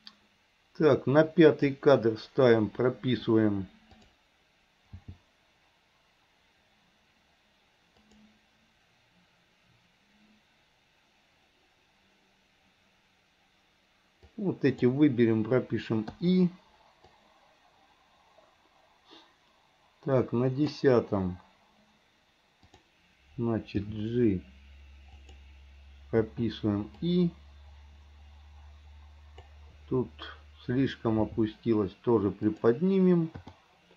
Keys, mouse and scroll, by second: 4.0 click, 5.0 g, 14.4-15.0 drag, 16.2 i, 17.2-20.9 drag, 22.7 click, 23.9 g, 26.4 i, 27.1-29.6 drag, 31.3 g, 33.5 i.